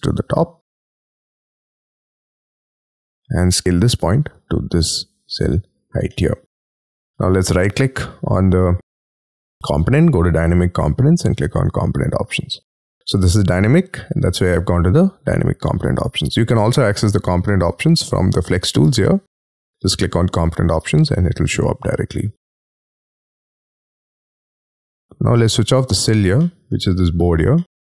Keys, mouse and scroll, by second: 6.1 middle click, 6.9 space, 7.4 right click, 25.0 middle click, 25.3 scroll down 6, 25.6-26.1 scroll up 10, 26.4 middle click, 27.5 middle click.